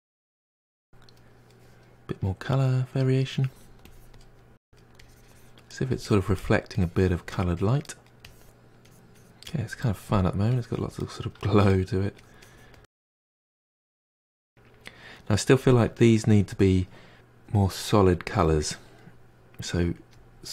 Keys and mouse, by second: 0.3 drag, 0.5 middle click, 0.6 click, 1.1-1.5 middle drag, 1.5 click, 2.6 drag, 2.9 middle drag, 3.1 drag, 3.4 middle click, 3.6 drag, 3.9 middle drag, 4.0 drag, 4.3 middle click, 4.5 drag, 4.6 middle drag, 4.7-5.2 drag, 5.2 middle drag, 5.3 drag, 5.5 middle drag, 5.7-6.1 drag, 6.1 middle drag, 6.3-6.7 drag, 6.7-7.0 middle drag, 7.0-7.3 drag, 7.3 middle drag, 7.5 drag, 7.7 middle drag, 7.9-8.3 drag, 8.3 middle click, 8.4-8.9 drag, 8.9 ctrl+middle click, 9.8 drag, 9.9-10.6 shift+middle drag, 10.6-11.2 drag, 11.2 middle drag, 11.5 drag, 11.7-12.1 shift+middle drag, 12.1-12.7 drag, 12.7-17.3 middle drag.